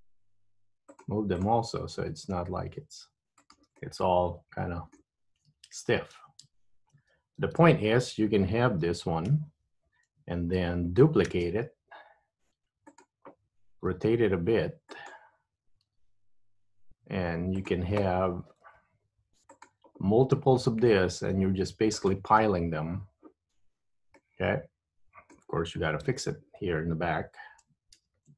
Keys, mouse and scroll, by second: 0.0 g, 1.5 click, 2.0 g, 3.9 middle click, 5.9 super+z, 6.6 super+z, 7.6 Tab, 9.4 KP_1, 11.4 shift+d, 14.0 r, 16.0 g, 18.8 r, 20.5 g, 24.3 middle click, 26.2 Tab, 28.1 ctrl+KP_1.